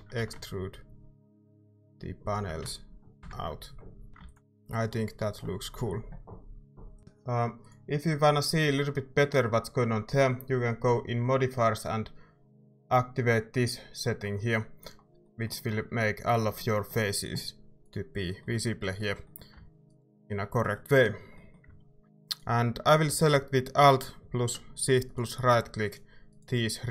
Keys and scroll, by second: 0.2 e, 4.1 Tab, 4.1 a, 4.2 ctrl+s, 7.0 Tab, 23.0 a.